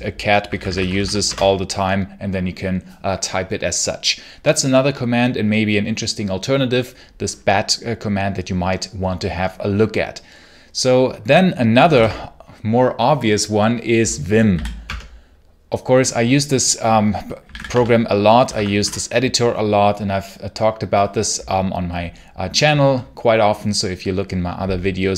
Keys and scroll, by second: 0.1-1.3 typing, 11.8 ctrl+l, 14.4 v, 14.7 space, 17.0-18.3 typing, 18.4 Tab, 18.7 Return, 25.0-25.1 typing.